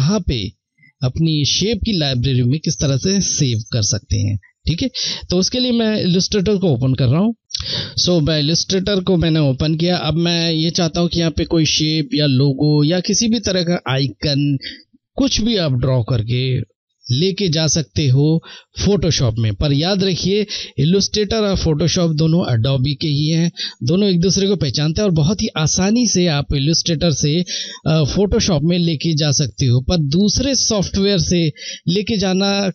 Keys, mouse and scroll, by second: 6.7 F1, 7.4 click.